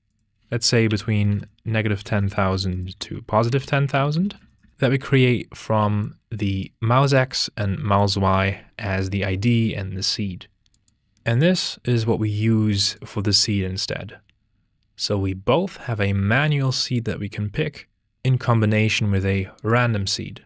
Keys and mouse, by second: 0.1-4.7 drag, 2.2 KP_0, 3.9 KP_0, 4.4 KP_0, 5.1 click, 10.7 click, 15.9 click, 16.7 click, 18.6 click, 19.3 ctrl+h, 19.6 click, 19.7 ctrl+h.